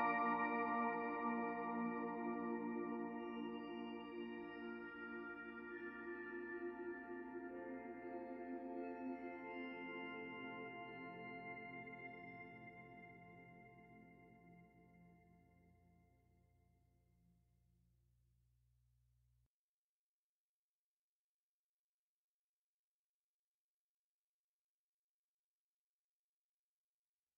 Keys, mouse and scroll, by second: 0.0 ctrl+KP_Add, 1.5 ctrl+a, 4.9 middle click, 6.2-6.7 scroll up 3, 6.7 shift+middle click, 7.2-7.7 scroll up 1, 7.7 middle click, 9.6 click, 10.4 middle click, 11.2 g, 12.4 middle click, 13.5 g, 17.9 click, 18.2 middle click, 18.8 g, 20.9 click, 21.2 g, 22.0 click, 22.2 g, 23.1 click, 23.3 g, 24.4 middle click, 26.4 shift+middle click, 27.1 middle click.